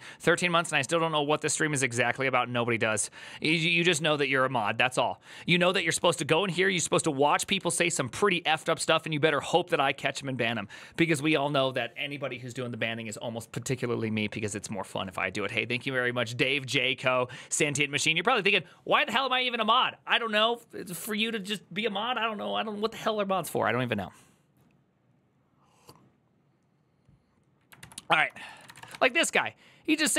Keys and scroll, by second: 27.6 alt+{, 28.1 ctrl+c, 28.2-29.0 typing.